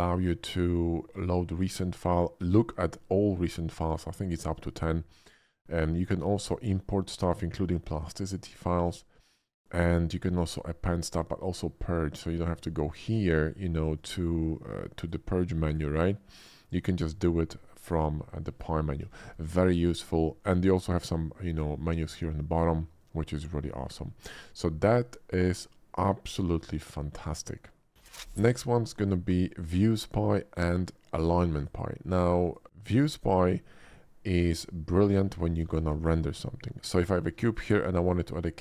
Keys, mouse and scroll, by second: 8.4 typing, 12.6 click, 14.0 click, 15.0 click, 15.6 click, 17.1 click, 17.8-19.0 drag, 19.1 ctrl+s, 31.6 click, 32.4 click, 32.7 x, 32.8 click, 33.7 shift+middle click, 34.6-35.2 shift+middle drag, 35.7 shift+a, 37.1 click, 38.1 shift+middle click.